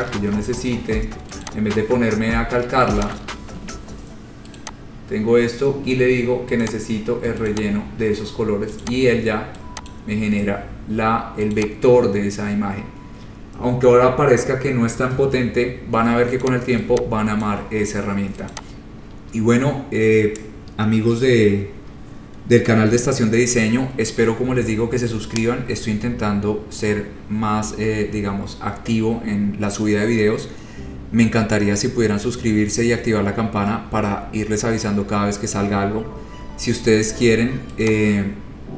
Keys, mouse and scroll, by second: 0.5 a, 1.7 click, 1.9 scroll, 3.4 shift+click, 3.9 shift+click, 4.8 click, 5.1 scroll, 5.2-5.9 scroll down 9, 6.9 click, 7.0-7.5 scroll, 7.8 click, 7.9 shift+click, 9.0 click, 10.1 click, 11.8 click, 12.2-12.9 scroll, 16.7 click, 17.7 click, 18.7 click, 19.4-19.8 scroll, 21.9-22.6 scroll down 4, 38.2 click.